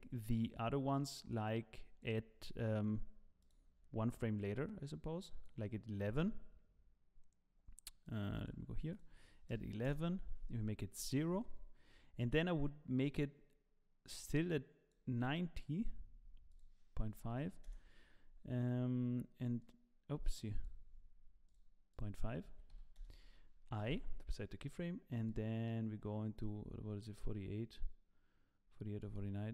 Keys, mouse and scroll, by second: 3.4 click, 4.3 click, 8.0 click, 8.3 click, 11.4 click, 11.4 i, 13.0 click, 16.5 click, 19.6 click, 21.4 click, 23.9 click, 23.9 i, 25.2 click.